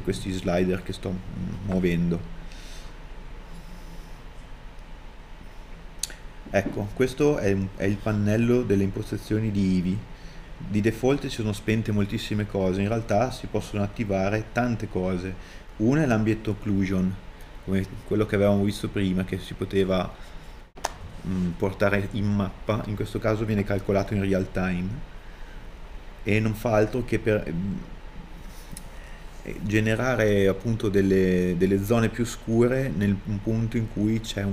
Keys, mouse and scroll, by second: 0.9 middle click, 30.3 KP_Enter, 31.9 middle click.